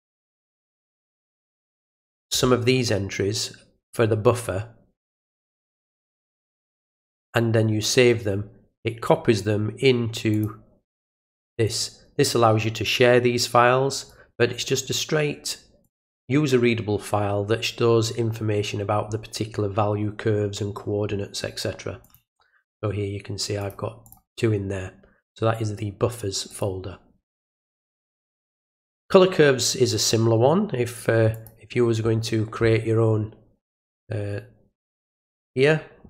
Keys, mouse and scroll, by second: 0.4 click, 1.9 click, 7.1 click, 7.8 click, 10.3 click, 11.7 click, 13.9 right click, 15.8 click, 22.0 click, 23.6 click, 24.1 click, 26.5 click, 28.4 click, 28.6 click, 31.3 click, 35.1 right click.